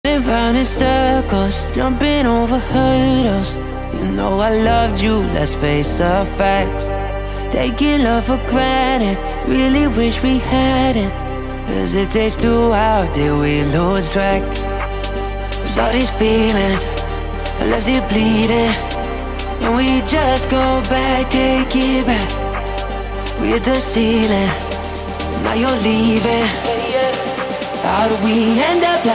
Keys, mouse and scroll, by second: 2.5 click, 3.1 click, 3.5 click, 3.9 middle click, 4.3 middle click, 4.6 middle click, 5.2 middle click, 5.7-6.4 scroll down 2, 6.8 middle click, 8.1-9.2 shift+middle drag, 9.4 middle click, 9.9 middle click, 10.7 shift+middle click, 11.6 middle click, 12.5 middle click, 19.9 w, 20.7 d, 24.5 a, 25.8 a, 27.1 a.